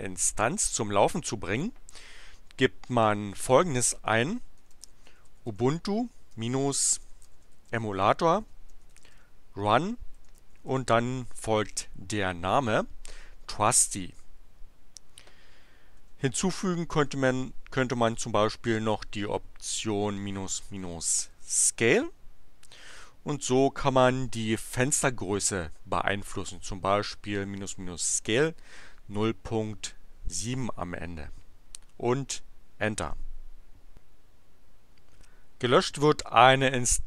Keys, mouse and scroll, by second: 4.5-11.8 typing, 16.0 space, 17.0 -, 18.8-21.3 typing, 24.1-25.1 typing, 33.0 Return.